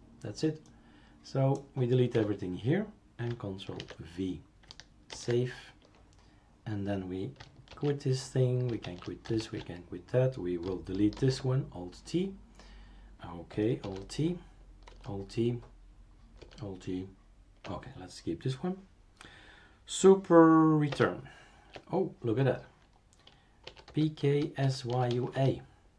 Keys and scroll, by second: 2.1 Delete, 3.8 ctrl+v, 5.1 ctrl+s, 7.7 shift+super+q, 8.8 shift+super+q, 9.4 shift+super+q, 11.2 alt+t, 13.8 alt+t, 14.9 alt+t, 16.4 alt+t, 20.9 super+Return, 23.6-25.9 typing.